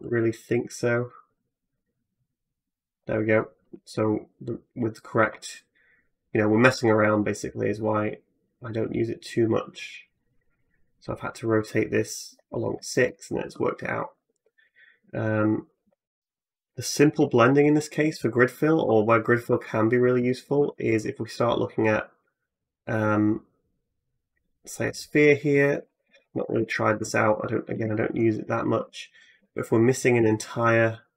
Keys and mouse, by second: 3.8-12.6 drag, 12.9-15.2 drag, 15.2 middle click, 15.5 click, 15.6-17.8 middle drag, 17.8 Tab, 18.6 a, 19.2 x, 20.4 shift+a, 23.4-24.7 middle drag, 25.0 middle click, 25.7 g, 25.9-29.4 middle drag, 27.6 KP_Decimal, 28.6 Tab, 29.1 3, 29.4 click, 29.7 middle click, 30.0-31.1 ctrl+drag.